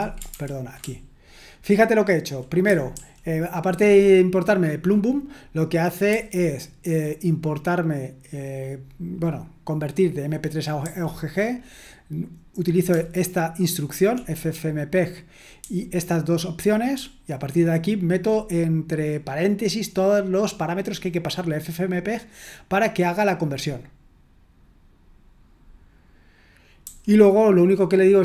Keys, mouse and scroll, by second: 0.0-1.6 typing, 6.1 j, 10.8 j, 12.9-14.1 typing, 15.6 j, 17.0-18.3 typing, 26.8 j.